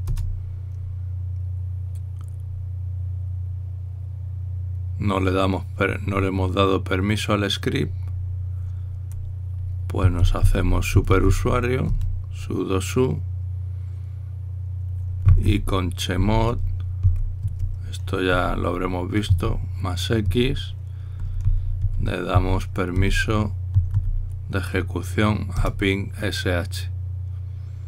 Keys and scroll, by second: 0.0-0.1 typing, 0.8 Return, 3.3 typing, 10.7-12.5 typing, 12.6 Return, 15.7-20.0 typing, 21.7-24.7 typing, 26.3 Return.